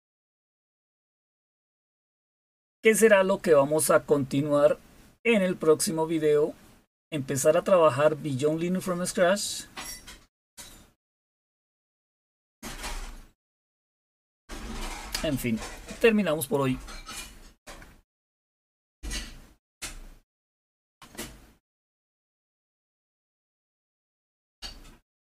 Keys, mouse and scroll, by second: 0.5-2.1 scroll down 1, 2.2-2.9 scroll up 1, 8.2-11.2 scroll down 4, 11.2-12.0 scroll down 1, 12.0-25.1 scroll up 4, 25.1 click.